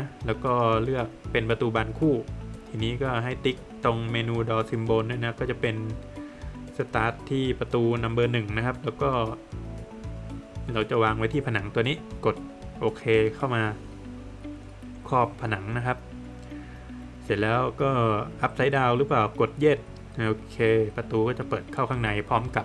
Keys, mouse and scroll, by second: 1.6 click, 3.6 click, 7.0 click, 14.1 click, 15.8 click, 19.7 Return, 22.1 middle click.